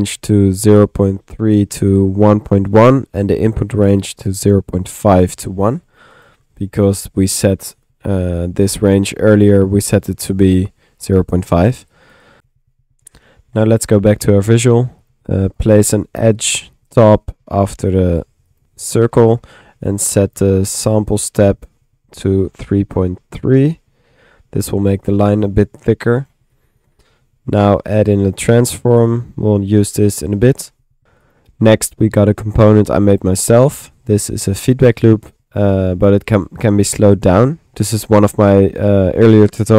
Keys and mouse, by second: 1.0-1.7 typing, 3.7 click, 9.6 click, 11.3-12.9 typing, 11.9 click, 15.0 click, 16.0 click, 16.9 click, 17.4 Tab, 17.8-18.5 typing, 18.6 click, 19.3 click, 21.2-25.4 middle drag, 25.9-28.9 drag, 28.4 Tab, 28.4-29.4 typing, 30.4 click, 30.7 click, 31.0 ctrl+z, 31.2-33.5 drag, 33.5-36.4 middle drag, 36.7 click.